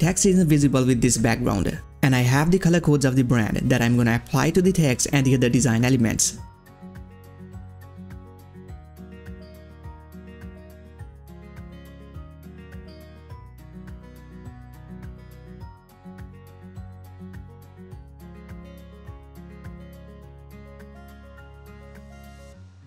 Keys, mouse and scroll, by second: 1.1 click, 1.1 click, 2.8 ctrl+c, 3.6 click, 7.2 ctrl+v, 7.4 Return, 8.1-10.0 drag, 11.8 ctrl+v, 12.2 Return, 12.8 click, 14.8 click, 16.5 ctrl+v, 16.9 Return, 17.6 click, 21.6 click.